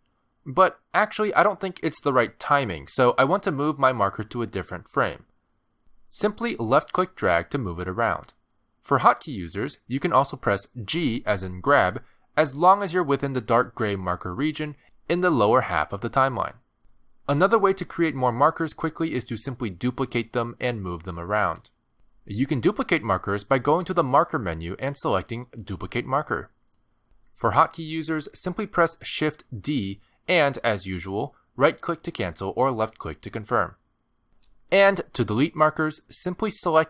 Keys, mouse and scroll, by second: 0.6 Return, 2.4 middle click, 7.2 click, 11.6 g, 15.0 g, 16.1 g, 24.7 click, 31.1 shift+d, 34.1 g, 35.5 click.